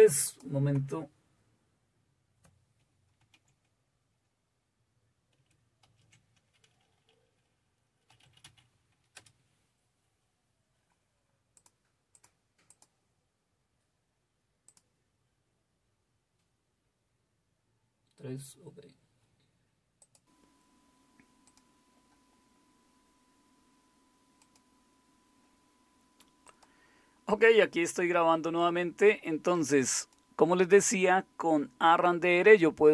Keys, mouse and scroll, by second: 3.1 super+w.